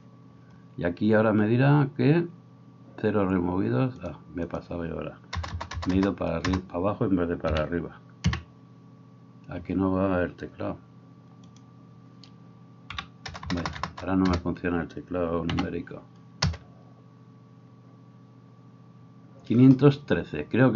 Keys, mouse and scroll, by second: 5.6 BackSpace, 5.9 BackSpace, 13.5 BackSpace, 13.7 BackSpace.